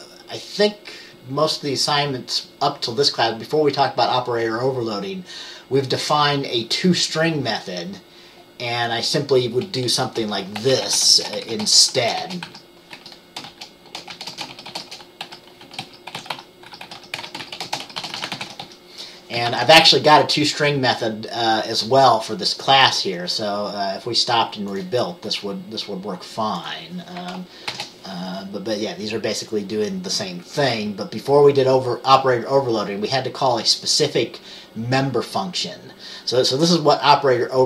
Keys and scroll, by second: 10.2 Return, 12.6-20.1 typing, 27.8 ctrl+b.